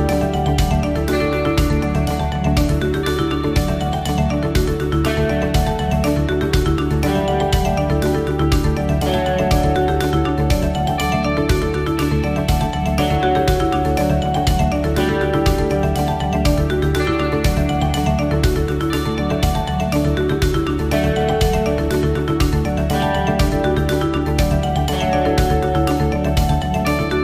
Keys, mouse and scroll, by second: 3.3 click, 3.9 middle click, 5.0 KP_7, 6.0-6.4 scroll down 2, 7.7 t.